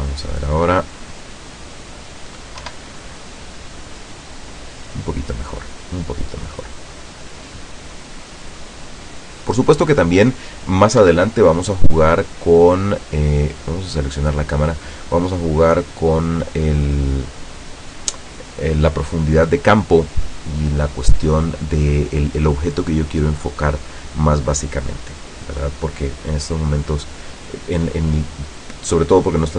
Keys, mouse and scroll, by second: 0.7-1.1 scroll up 2, 2.7 F12, 11.1 Escape, 12.2 scroll down 2, 13.7 right click, 14.9 click, 15.7-16.3 scroll down 1.